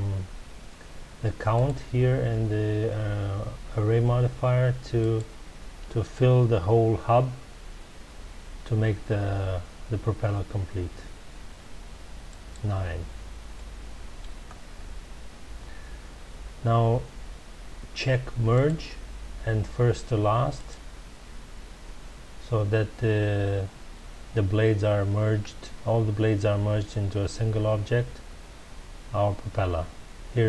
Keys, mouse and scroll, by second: 1.5 click, 5.0 click, 12.2 click, 13.5-14.4 middle drag, 14.4 scroll up 1, 15.1-18.0 scroll down 1, 18.5 click, 20.5 click, 28.8 scroll down 1.